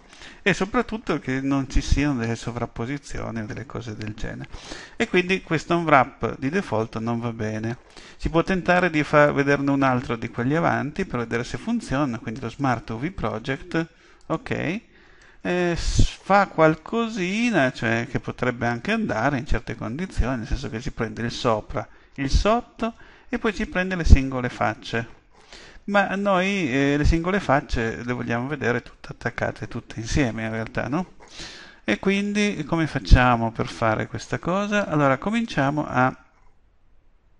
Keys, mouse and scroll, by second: 6.5 u, 31.3-34.9 middle drag, 35.7-37.3 middle drag.